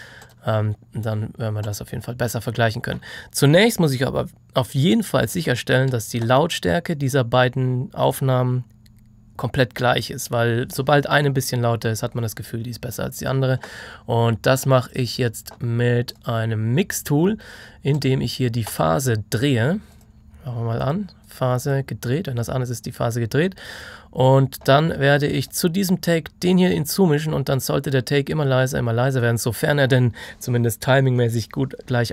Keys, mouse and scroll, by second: 14.7 click.